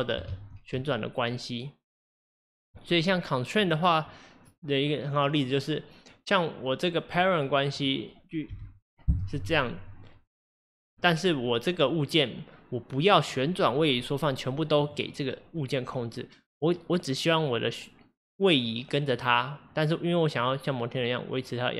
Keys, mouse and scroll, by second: 0.3 ctrl+z, 2.0 click, 3.6 click, 7.1 click, 7.8 click, 8.5 g, 10.9 click, 14.8 click.